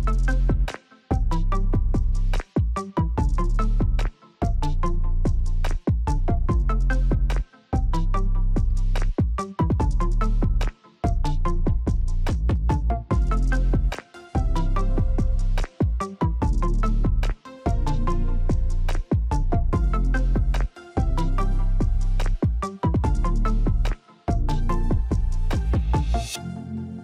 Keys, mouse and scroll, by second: 8.3 click, 9.7 alt+click, 11.5 alt+click, 13.0 ctrl+click, 16.6 click, 19.7 alt+click, 21.5 click.